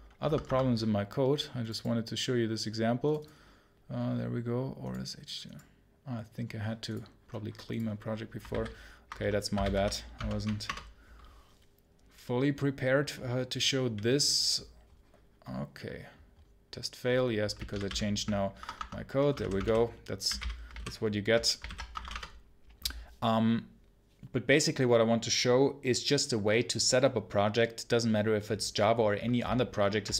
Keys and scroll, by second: 10.5 Return, 22.0 Return.